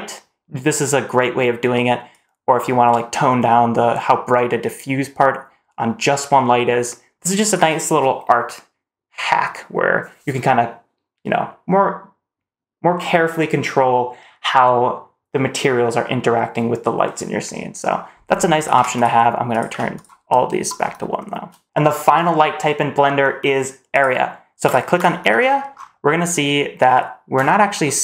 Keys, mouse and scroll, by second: 1.9-7.4 drag, 18.4-18.8 drag, 19.3 click, 21.0 shift+middle click, 23.8 click, 24.5 click, 24.8 click, 25.2-26.3 scroll down 3, 26.3-27.2 scroll up 1, 27.3 shift+middle drag, 27.7-28.0 scroll up 3.